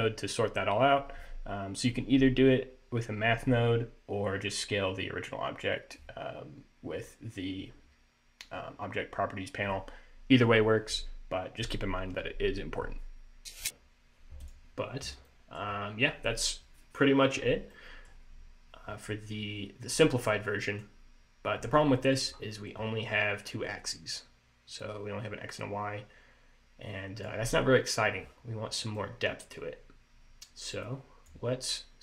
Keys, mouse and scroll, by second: 13.5 click, 14.5 click, 15.4 middle click, 15.8 scroll down 2, 17.8 middle click, 18.5-18.8 scroll down 2, 19.2-20.1 scroll down 2, 20.1 click, 21.7 scroll up 2, 22.1 middle click, 22.4 scroll up 2, 23.8 click, 28.2-29.1 scroll down 4, 29.1 middle click, 31.0 click, 31.8 click.